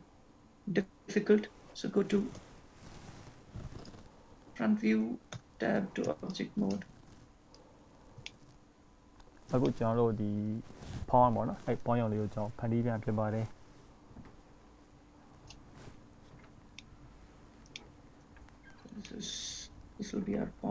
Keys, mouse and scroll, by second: 5.7 Tab, 6.5 shift+click, 7.7 click, 8.5 shift+middle click, 10.4-11.0 scroll up 3, 11.0 shift+middle click, 11.0 scroll up 1, 12.5 scroll down 2, 13.0 click, 14.9 click, 16.6 scroll down 3, 17.0 shift+middle click, 18.1 shift+middle click, 18.6-19.1 scroll up 4, 19.3 shift+middle click, 20.4 scroll down 1.